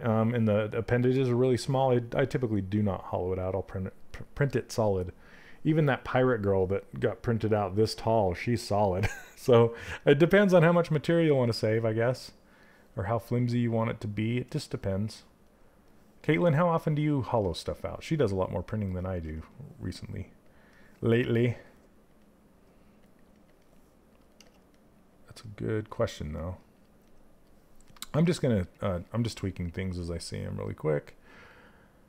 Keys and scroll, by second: 18.8 s.